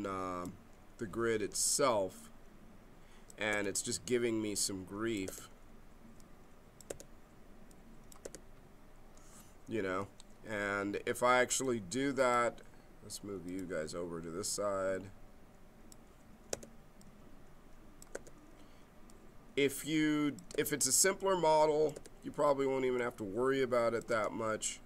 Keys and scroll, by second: 1.4 g, 3.5 g, 5.3 g, 6.9 g, 8.2 g, 16.5 g, 18.2 g, 20.5 g, 21.9 g, 24.1 g.